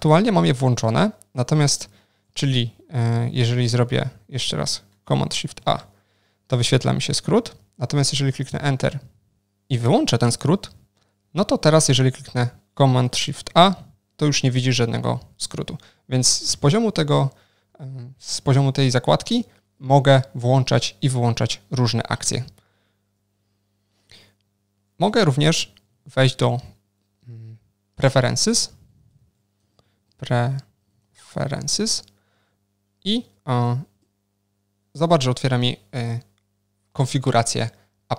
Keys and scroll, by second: 5.7 ctrl+shift+super+a, 16.5 alt+shift+d, 19.0 alt+shift+d.